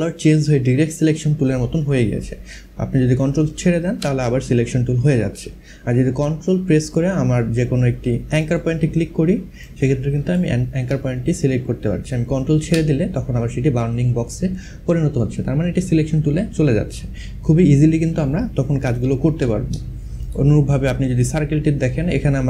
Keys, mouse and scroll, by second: 8.0 click, 9.2 ctrl+click, 18.5 ctrl+z, 19.9 click.